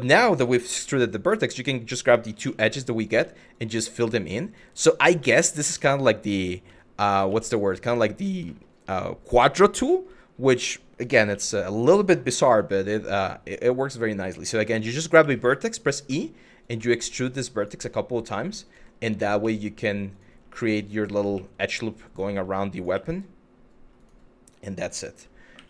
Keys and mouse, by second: 0.3 2, 0.7 click, 2.1 f, 2.7 click, 3.2 shift+click, 3.5 f, 4.7 shift+click, 5.5 shift+middle click, 7.5 click, 8.2 middle click, 9.6 middle click, 10.9 1, 12.2 g, 13.6 click, 14.8 e, 15.7 e, 16.2 click, 17.2 click, 18.3 click, 19.7 click, 21.7 click, 22.4 click, 25.2 2.